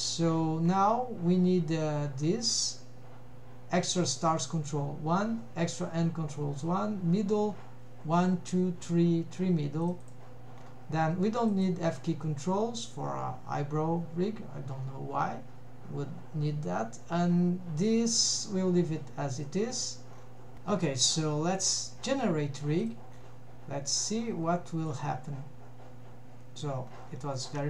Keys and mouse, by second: 10.1 drag, 11.6 click, 22.8 drag, 24.9 click, 27.4 shift+middle click.